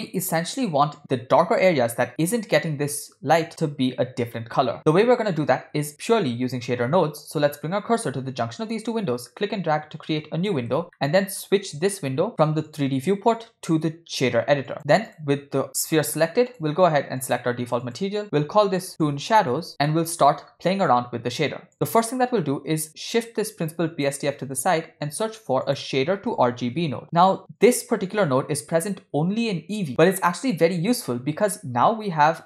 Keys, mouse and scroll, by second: 9.2-10.5 drag, 10.9-11.5 shift+middle drag, 12.7-14.7 drag, 15.1 click, 16.6 click, 17.8-19.7 drag, 18.9 shift+o, 19.8 middle click, 20.1-20.8 scroll up 8, 22.1-24.1 drag, 24.7 shift+a, 28.2-28.9 drag.